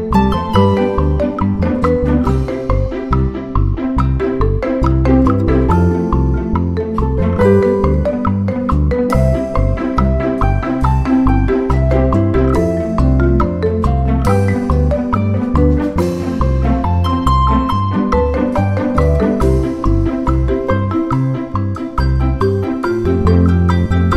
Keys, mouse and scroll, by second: 0.2-2.5 drag, 3.0 click, 3.7 ctrl+click, 4.2-4.5 ctrl+scroll up 2, 5.0 ctrl+click, 5.6 ctrl+click, 6.2 ctrl+click, 8.1 click, 8.8 click, 9.8 Delete, 11.2 click, 12.3 ctrl+d, 12.8 ctrl+click, 13.7-14.8 ctrl+drag, 15.0-16.5 ctrl+shift+drag, 16.8 ctrl+d, 17.1-18.8 ctrl+drag, 19.0 click, 19.8 click, 20.6 click, 21.5 Delete, 22.3 ctrl+Up, 23.5 click.